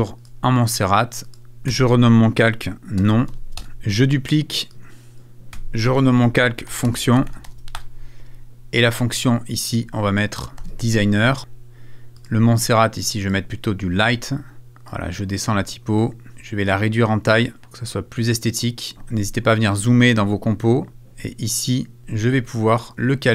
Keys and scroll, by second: 1.7 F2, 2.5 shift+F2, 2.7-3.8 typing, 5.5 F2, 6.2 shift+F2, 6.5-7.9 typing, 8.5 Return, 10.3-11.1 typing.